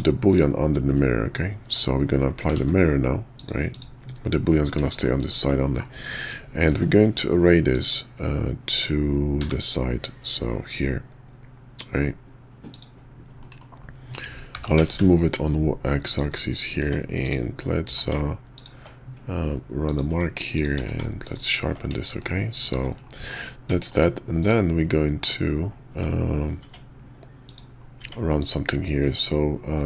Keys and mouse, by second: 1.7 q, 2.7 ctrl+`, 4.5 click, 4.9 shift+click, 5.3 click, 6.2-6.7 drag, 6.7 q, 13.4 middle click, 14.5 g, 16.8 Tab, 17.2 click, 17.8 q, 20.1 Tab, 20.5 click, 20.8 q, 22.7 shift+2, 23.8 shift+click, 24.4 click, 25.9 Tab, 26.6 Tab, 27.4 click, 28.0 Tab, 28.4 click.